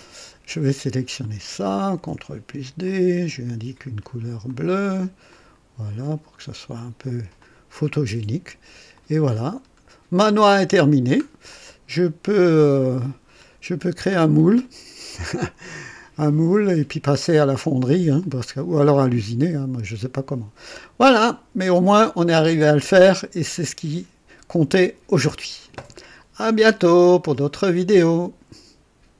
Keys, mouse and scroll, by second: 1.2 click, 1.9 ctrl+d, 2.8 ctrl+click, 4.4 click, 5.3 click, 6.7 click, 7.4 click, 7.9-8.7 drag, 9.0 click, 9.6 scroll up 1, 10.2-10.7 right drag, 10.8-11.3 scroll down 1, 11.5-12.9 drag, 13.3 scroll up 1, 14.6-15.3 right drag, 15.7-17.1 drag, 18.2-22.0 drag, 23.2-24.2 right drag, 27.9 right click.